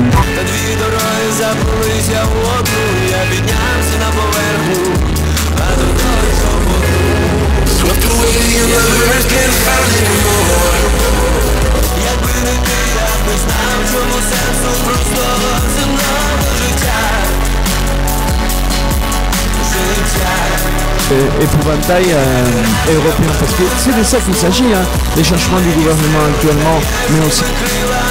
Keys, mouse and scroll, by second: 0.2 Page_Down, 11.8 Page_Down, 27.4 Page_Down.